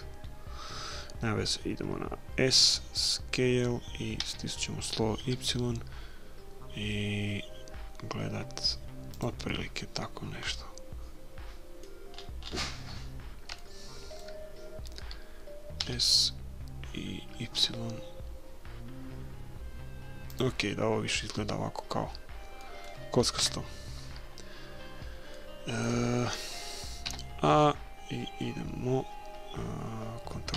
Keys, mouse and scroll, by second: 4.2 s, 9.5-11.3 middle drag, 12.1-15.6 middle drag, 15.8 s, 22.6-27.2 middle drag, 23.4 KP_1, 27.1 a.